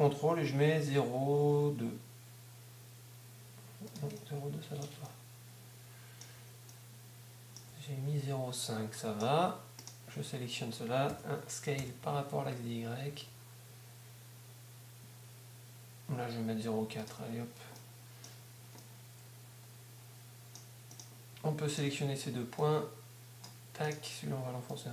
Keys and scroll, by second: 6.4 Tab, 10.2 Tab, 11.6-13.6 typing.